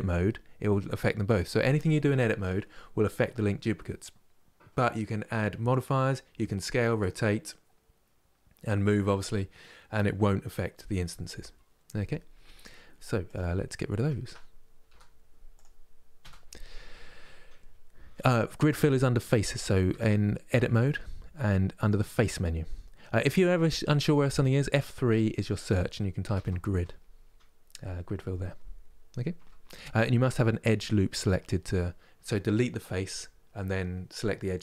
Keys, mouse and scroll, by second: 13.9 Tab, 14.5 Delete, 15.2 click, 15.9 Delete, 19.1 click, 19.5 Tab, 21.4-24.4 drag, 29.8-32.9 middle drag.